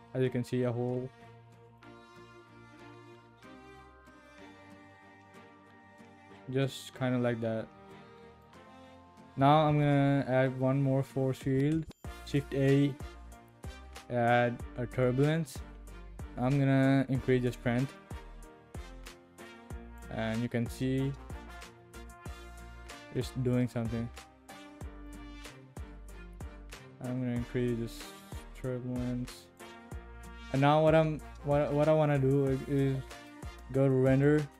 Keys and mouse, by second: 1.3-1.8 drag, 4.3-8.4 drag, 9.7 shift+a, 17.3-20.0 drag, 20.9-22.1 drag, 22.6-22.9 shift+drag, 25.2-29.6 drag, 34.1 click.